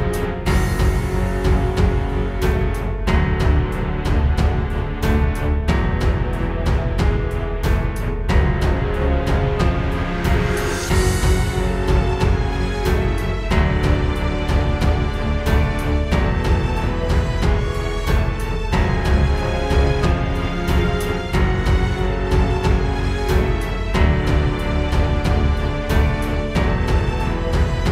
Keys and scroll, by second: 3.4 super+z, 18.2 space, 18.8 space.